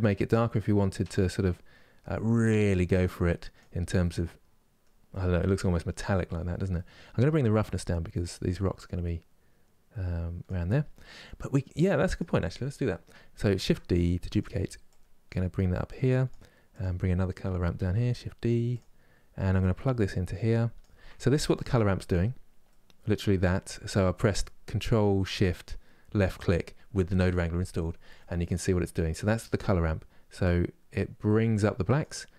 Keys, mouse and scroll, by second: 3.7-7.8 middle drag, 7.8-13.2 drag, 13.2 shift+d, 14.6-17.4 drag, 17.4 shift+d, 20.5 click, 22.4-30.1 middle drag, 30.1-32.3 drag.